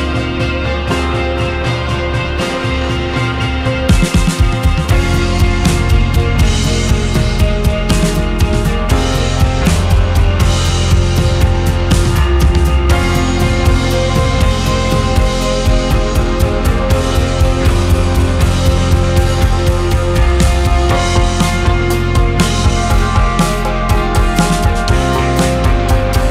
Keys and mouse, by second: 1.3-2.3 drag, 2.3 click, 4.8-5.8 drag, 6.6-7.6 drag, 9.2-10.2 drag, 10.4 click, 12.3 click, 15.0-16.1 drag, 17.0 click, 18.0 click, 19.3-20.3 drag, 22.3-23.3 drag, 25.3-26.3 right drag.